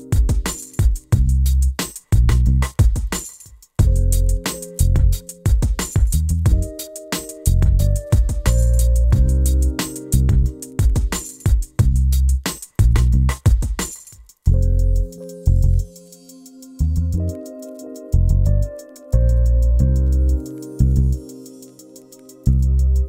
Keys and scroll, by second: 7.5 c, 9.0 t, 11.6 e, 23.0 5.